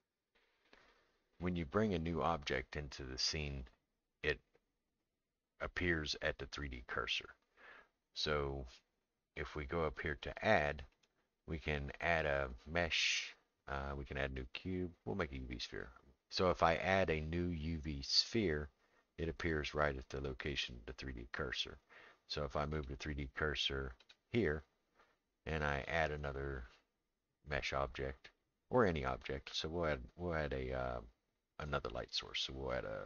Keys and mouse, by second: 10.9-18.3 drag, 22.7 right click, 24.0 click, 25.8-33.0 drag.